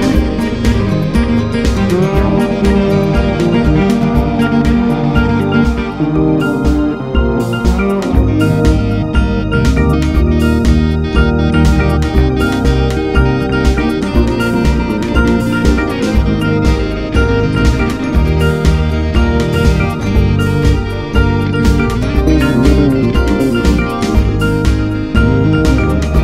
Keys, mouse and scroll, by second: 0.5-2.7 drag, 2.7-3.4 scroll down 1, 3.4-3.7 drag, 3.7-5.0 scroll up 5, 5.0-6.3 drag, 6.3 scroll down 2, 6.8 space, 13.1 space, 13.8 click, 14.1-16.6 right drag, 16.6 click, 17.5 scroll up 5, 18.2-18.8 scroll up 1, 18.8-21.8 drag, 23.4 click, 24.3 ctrl+a, 25.7 KP_Divide.